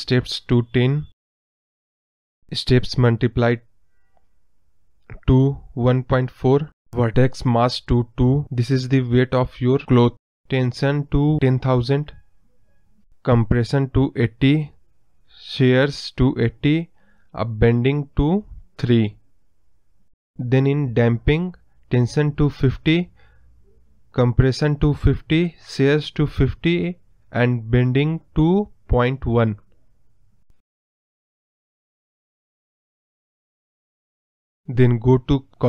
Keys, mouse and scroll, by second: 6.1-14.3 drag, 14.3 KP_0, 16.8-20.6 drag.